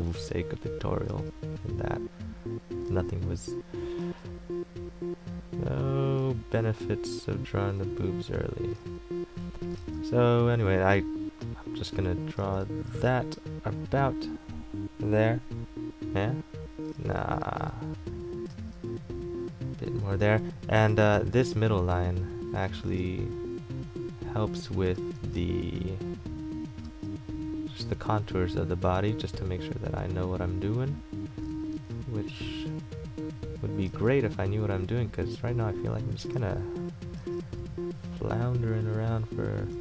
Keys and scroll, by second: 0.3 ctrl+z, 1.3 ctrl+z, 6.6 ctrl+z, 7.5 ctrl+z, 12.6 ctrl+z, 17.1 ctrl+z, 18.7 ctrl+z, 34.1 ctrl+z.